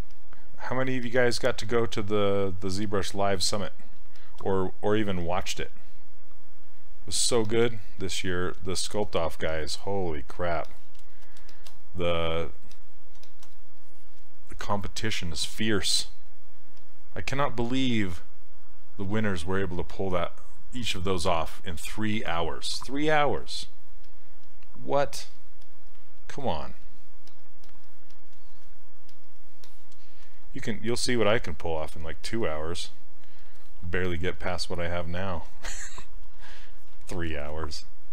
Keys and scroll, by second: 5.2 s, 24.0 s, 31.3 s.